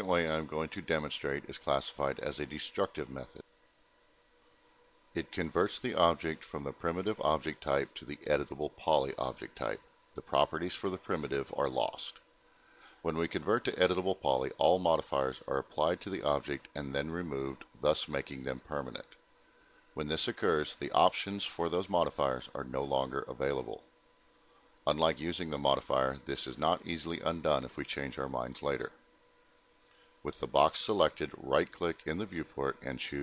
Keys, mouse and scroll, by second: 2.5 right click, 6.3 click.